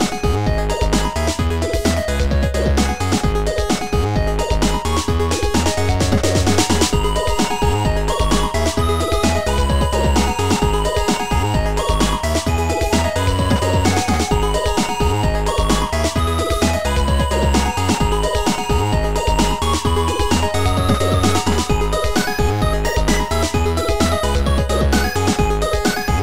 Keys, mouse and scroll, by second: 1.4 click, 1.7 ctrl+z, 3.2 click, 4.1 click, 4.8 ctrl+z, 4.8 click, 5.9 Delete, 7.1 click, 9.0 Delete, 9.0 click, 10.6 Delete, 12.2 click, 12.7 shift+click, 15.4 shift+click, 17.3 shift+click, 19.5 click, 23.2 click, 23.9 shift+click, 25.7 shift+click.